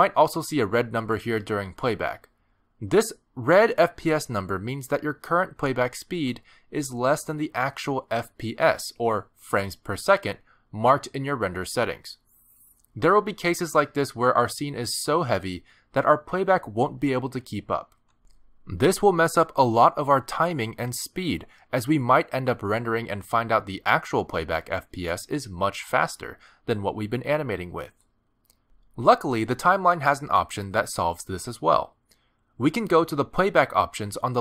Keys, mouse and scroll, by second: 8.8 click, 9.4 click, 23.0 middle click, 24.4 middle click, 28.9 click, 31.6 click.